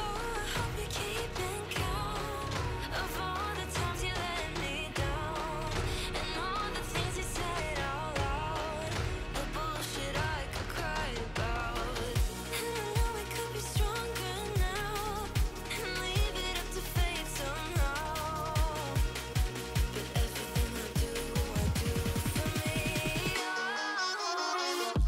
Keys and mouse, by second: 0.3 ctrl+], 2.4 ctrl+z, 3.6 ctrl+click, 5.4 click, 5.6 Delete, 5.8 click, 6.1 ctrl+click, 8.4 click, 10.7 click, 14.9 click, 16.2 click, 19.6 click, 22.0 alt+click, 22.6 click, 23.6 click.